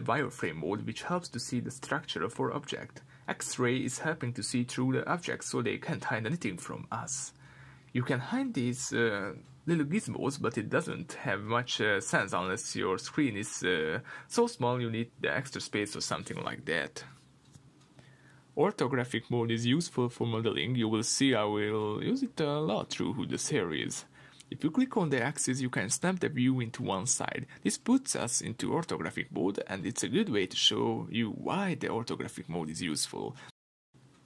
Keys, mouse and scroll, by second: 0.7-3.0 scroll up 1, 3.0-4.4 drag, 6.2 click, 10.1 click, 10.8-16.7 middle drag, 11.4-16.7 scroll down 2, 17.9 click, 18.8-22.5 middle drag, 22.5 click, 23.2-24.4 middle drag, 24.4 click, 26.1 click, 30.5 middle click, 32.6-34.2 middle drag.